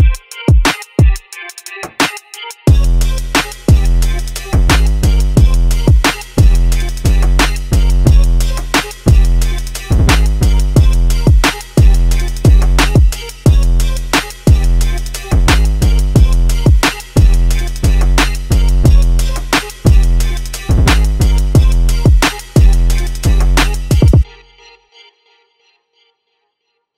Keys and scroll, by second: 0.6 1, 0.9 Return, 2.0-3.1 typing.